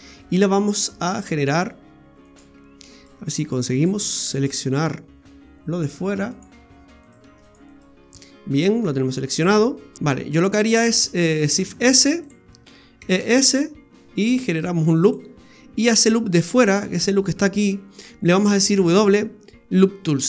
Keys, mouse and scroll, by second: 1.1 click, 2.3 right click, 2.9 right click, 3.4 right click, 3.8 alt+shift+right click, 3.9 right click, 4.4 right click, 4.8-5.2 scroll up 5, 6.3 click, 7.0 right click, 7.4 alt+shift+right click, 7.7 right click, 8.2-8.8 scroll down 5, 9.0 shift+middle click, 11.6 shift+s, 13.0 e, 18.7 w.